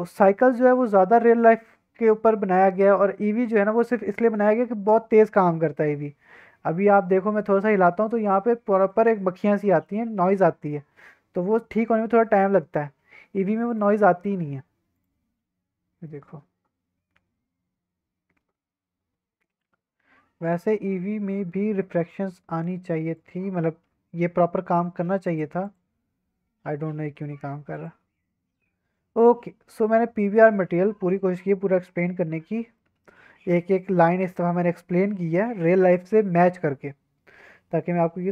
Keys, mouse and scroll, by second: 0.1-7.1 drag, 7.5-8.0 middle drag, 8.7 middle click, 9.2 scroll up 2, 9.7 middle click, 9.8 scroll down 1, 10.3 scroll up 1, 10.7 scroll down 2, 11.0 scroll up 3, 11.4 scroll down 2, 11.8 scroll up 1, 13.7-15.3 drag, 16.0-19.5 middle drag, 20.0-20.7 scroll up 2, 20.7-23.1 scroll down 1, 23.1 click, 23.5-25.3 scroll down 5, 25.3 click, 25.6 click, 26.9-27.7 scroll up 4, 27.7 click, 29.3 scroll down 2, 29.6 middle click, 30.1-30.7 scroll down 4, 30.7-32.4 scroll up 4, 32.4 scroll down 1, 32.7 middle click, 34.1 middle click, 35.1 scroll up 2, 35.6 middle click, 37.4-38.3 scroll up 1.